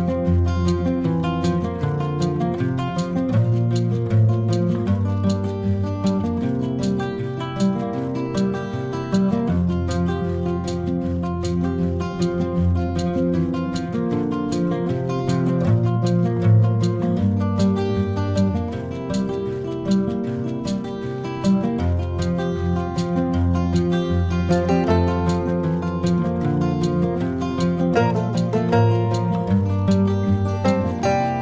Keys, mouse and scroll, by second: 9.6 click, 11.4 click, 17.2 drag, 24.6 click, 26.3 click.